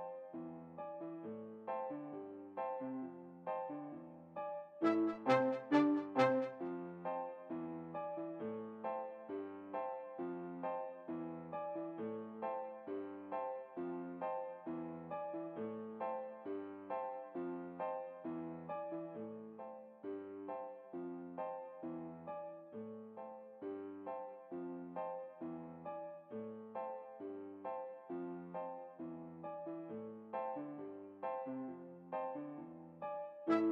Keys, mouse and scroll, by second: 2.9-5.2 middle drag, 5.3 middle click, 5.6-7.0 drag, 15.7-17.3 middle drag, 19.8-21.4 drag, 21.9-23.3 drag, 22.7-25.1 middle drag, 23.6-25.0 right drag, 25.1 right click, 25.5-27.4 middle drag, 30.0-31.5 middle drag.